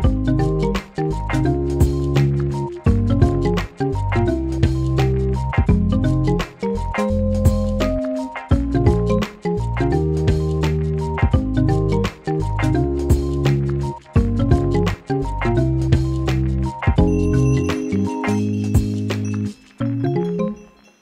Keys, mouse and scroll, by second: 0.8-6.2 drag, 6.2 ctrl+c, 6.4 ctrl+f, 6.7-8.1 drag, 9.6 click, 12.5 click, 13.2 right click, 13.5 click, 13.9 right click, 14.2 click, 14.7 right click, 15.1 click, 15.5-17.0 alt+shift+drag, 17.0-19.4 drag, 20.3 ctrl+shift+[.